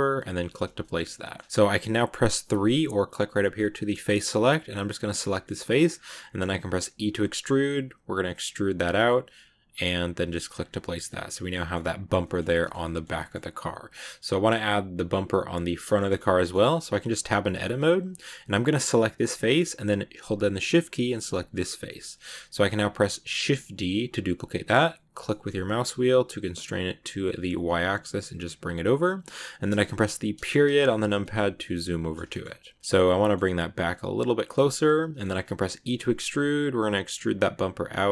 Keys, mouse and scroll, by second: 0.7 shift+middle click, 1.1 scroll up 1, 1.1-2.4 middle drag, 2.4 3, 3.4 click, 4.9 right click, 5.2 middle click, 5.7-6.7 scroll up 2, 6.7 e, 10.3-10.9 scroll down 7, 10.5 Tab, 10.9 middle click, 11.6 scroll up 2, 12.1 middle click, 12.7 scroll up 1, 12.7 shift+middle click, 13.3-13.9 scroll down 2, 13.9-16.1 middle drag, 16.1 scroll up 2, 16.3 shift+middle click, 17.0 Tab, 17.5 shift+middle click, 17.7-18.8 scroll up 2, 18.8 right click, 20.9 shift+right click, 21.4 middle click, 21.6 scroll down 2, 21.8-23.3 shift+middle drag, 23.3 shift+d, 30.2 KP_Decimal, 30.9 scroll down 3, 31.1-32.3 middle drag, 32.3-32.7 scroll up 3, 32.7 scroll down 1, 32.8 middle click, 33.0 g, 34.6 middle click, 35.6 e.